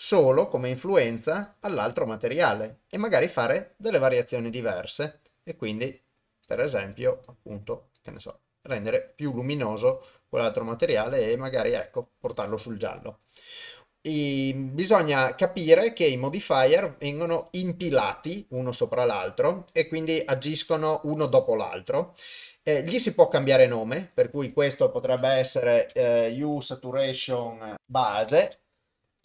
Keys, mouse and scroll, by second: 0.3 click, 1.5-2.6 drag, 4.1-5.2 drag, 5.9 click, 7.2 click, 8.9 click, 10.9-12.4 drag, 24.0-28.5 drag.